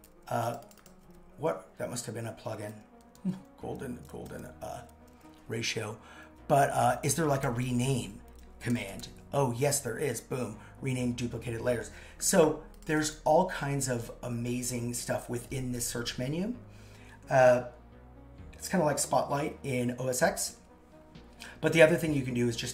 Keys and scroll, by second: 13.3 super+x.